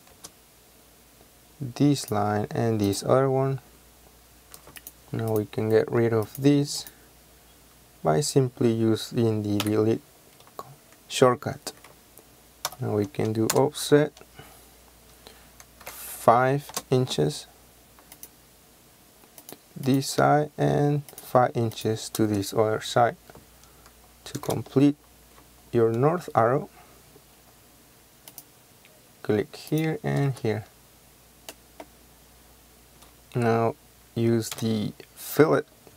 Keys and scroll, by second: 0.3 space, 9.7 Delete, 12.8 o, 13.6 Return, 15.9 KP_5, 16.8 Return, 22.3 space, 24.4 l, 24.5 space, 30.4 space, 32.8 f, 33.1 Escape, 34.6 f.